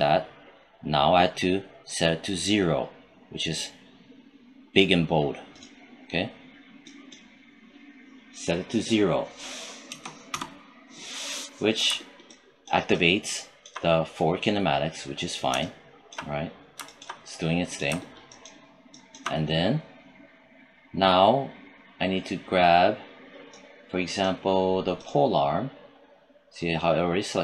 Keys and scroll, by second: 9.8 0, 10.2 Return.